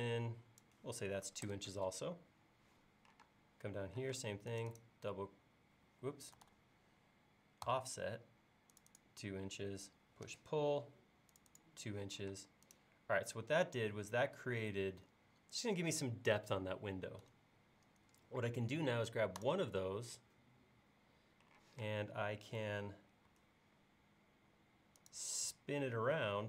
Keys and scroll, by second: 1.3 2, 1.4 Return, 3.3 space, 6.4 super+z, 7.7 f, 10.3 p, 12.3 space, 21.7 q, 23.3 shift+q.